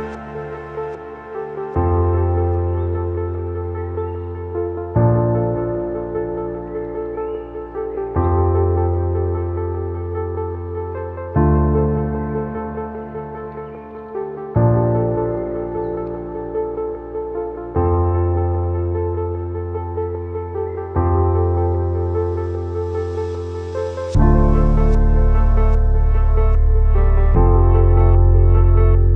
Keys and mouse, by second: 0.1 2, 0.4 alt+click, 1.3 shift+middle click, 1.9 alt+shift+click, 3.3-5.2 middle drag, 6.8 x, 8.2 ctrl+s, 8.5-9.6 drag, 9.7 a, 10.2 a, 10.5 1, 10.9 shift+click, 11.3 click, 12.4 shift+middle click, 12.9 middle click, 13.4 shift+middle click, 14.5 middle click, 16.3 shift+middle click, 16.8 shift+click, 17.3 j, 18.1 click, 18.7 shift+click, 19.4 click, 20.0 shift+click, 20.2 j, 20.7 click, 21.3 shift+click, 21.5 j, 22.0 click, 22.5 shift+click, 22.7 j, 23.2 click, 23.8 shift+click, 24.0 j, 24.5 click, 25.1 shift+click, 25.4 j, 25.9 click, 26.5 shift+click, 26.7 j, 27.1 click, 27.7 shift+click, 27.9 j, 28.8 shift+middle click.